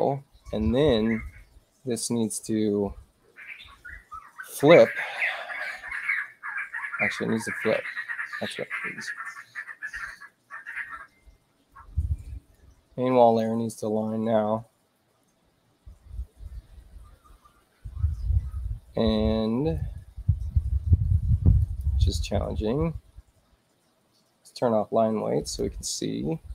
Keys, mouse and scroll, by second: 7.3 click, 12.4 click, 19.7-21.7 drag, 21.5 right click, 25.4 click.